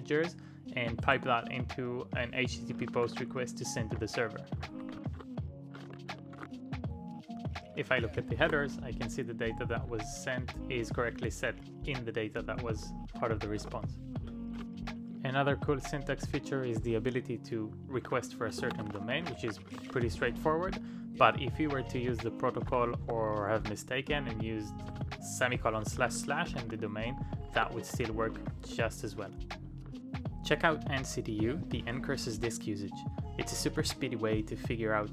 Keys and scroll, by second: 1.0 shift+\, 1.4 space, 2.5-6.9 typing, 9.0 [, 10.2 ctrl+u, 12.5-13.0 typing, 14.3-15.5 typing, 16.8-20.7 typing, 22.3-23.1 typing, 25.7 ctrl+p, 25.7-28.9 typing.